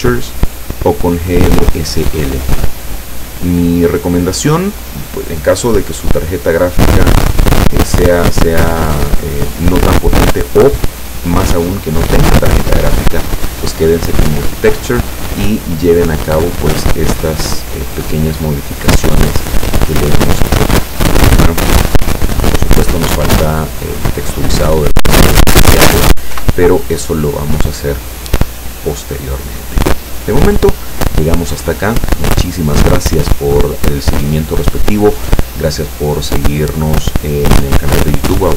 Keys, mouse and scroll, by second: 3.0 click, 16.2 click, 16.7-17.8 scroll down 6, 19.5-21.2 scroll up 8, 26.3 p, 28.4 Escape.